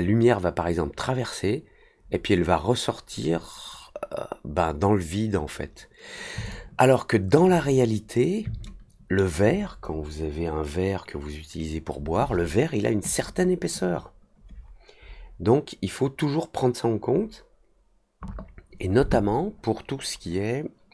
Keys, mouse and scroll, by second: 6.4-7.3 alt+drag, 8.6-9.1 alt+middle drag.